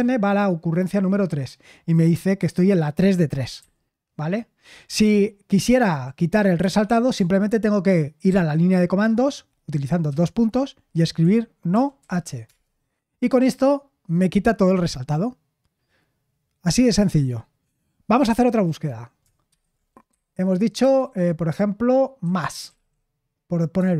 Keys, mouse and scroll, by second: 3.5 n, 6.5 Escape, 10.0 shift+;, 11.2-12.4 typing, 19.5-20.8 typing, 21.9-23.2 typing, 23.7 Return.